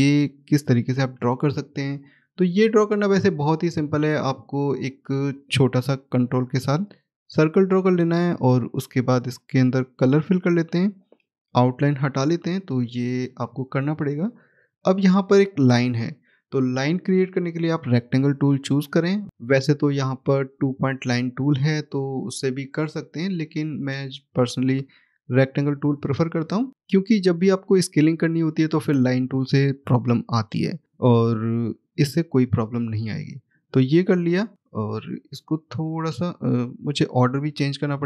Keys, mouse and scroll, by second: 2.6 click, 4.7 ctrl+l, 9.8 click, 11.6 right click, 13.1 click, 17.5 click, 23.3 click, 25.6 scroll up 1, 26.9 click, 31.7 right click, 33.4 click, 35.6-36.3 scroll up 1, 36.3 click, 37.3-37.9 scroll down 1.